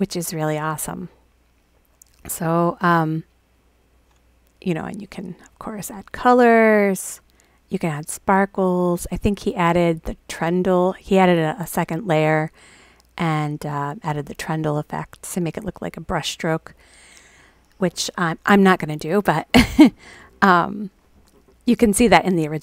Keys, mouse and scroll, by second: 5.2 click, 6.0 click.